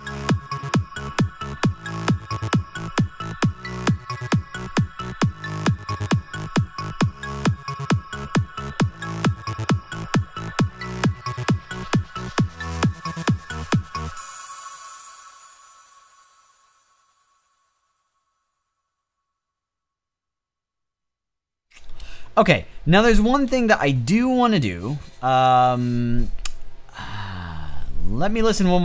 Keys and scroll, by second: 22.2 space.